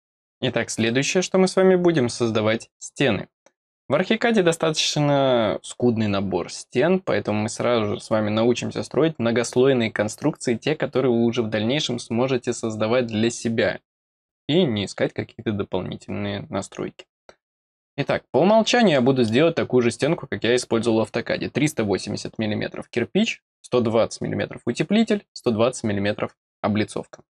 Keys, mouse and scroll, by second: 18.5 scroll down 2, 18.9 middle click, 19.5-19.9 scroll up 4.